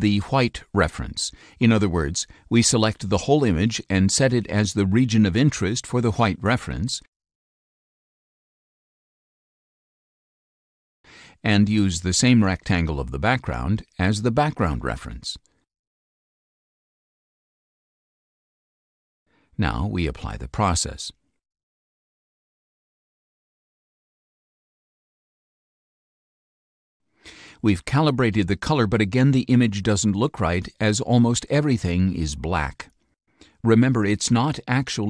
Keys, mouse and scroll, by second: 0.2 click, 1.9-6.2 drag, 7.2 click, 7.6-9.8 drag, 12.1 click, 13.0-15.0 drag, 18.8 click, 21.2 click, 34.3-35.0 drag.